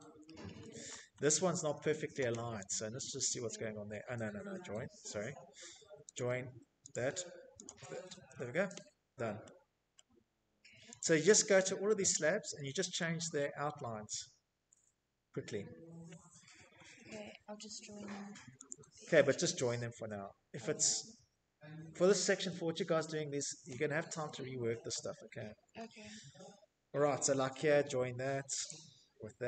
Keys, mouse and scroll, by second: 0.4 scroll, 0.4 Escape, 0.4 middle click, 1.1 click, 2.4 click, 2.7 click, 2.7 Escape, 2.9 Escape, 4.6 click, 5.4 click, 6.1 click, 6.4 Escape, 6.5 middle click, 6.6 middle click, 6.7 Escape, 6.8 middle click, 6.9-7.2 scroll, 8.4 scroll, 9.4 click, 9.9 scroll, 10.4 middle click, 11.8-14.6 middle click, 14.7 middle click, 14.8 middle click, 14.9 middle click, 15.0 Escape, 15.3 Escape, 15.5 Escape, 15.7 middle click, 15.8 middle click, 16.3 Escape, 17.1 click, 17.5 Escape, 17.5-17.9 scroll, 18.3-18.7 scroll, 19.2-19.9 scroll, 19.6 Escape, 19.9 middle click, 20.1 middle click, 20.4 middle click, 21.4 middle click, 21.5 middle click, 21.6 middle click, 22.5 middle click, 22.6 middle click, 22.8-24.4 scroll, 26.2 j, 27.1 click, 27.9 Escape, 28.1 Escape, 28.5-28.9 scroll.